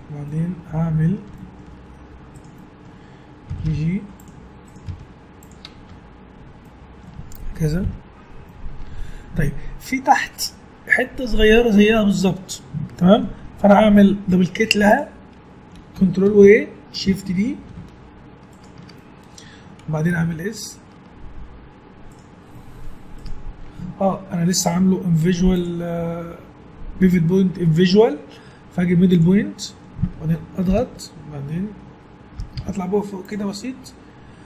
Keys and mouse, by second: 1.5 middle click, 2.3 right click, 2.7 click, 3.5 g, 4.6 right click, 4.8 g, 5.8 right click, 5.9 Tab, 6.4 middle click, 7.8 KP_Divide, 12.9-14.6 middle drag, 14.6 Tab, 15.9 a, 16.2 a, 17.6 shift+d, 18.9-21.0 middle drag, 20.1 s, 22.1-23.2 right drag, 22.5-24.8 middle drag, 24.8 right click, 25.6-27.3 drag, 29.7-30.7 middle drag, 30.7 ctrl+l, 32.5 g.